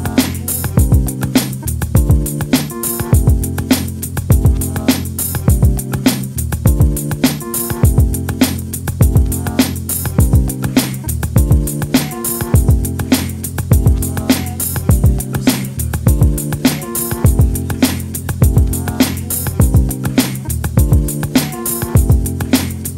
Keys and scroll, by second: 0.2 shift+Return, 4.5 Delete, 5.3 space, 12.9 ctrl+alt+z.